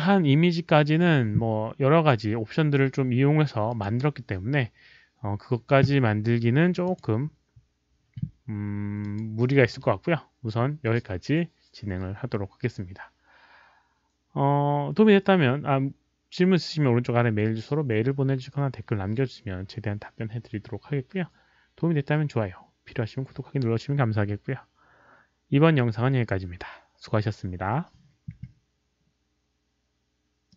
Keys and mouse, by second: 3.6 click, 6.8 click, 9.0 click, 14.4 click, 17.6 click, 30.5 click.